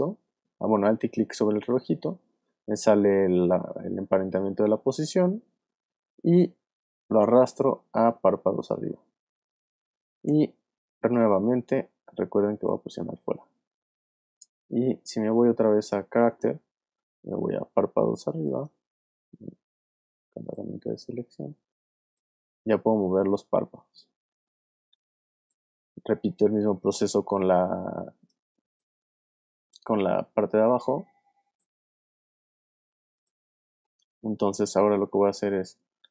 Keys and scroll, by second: 17.0 space, 19.7 v, 25.3 shift+super+z, 27.3 super+space, 34.6 alt+space, 35.4 space.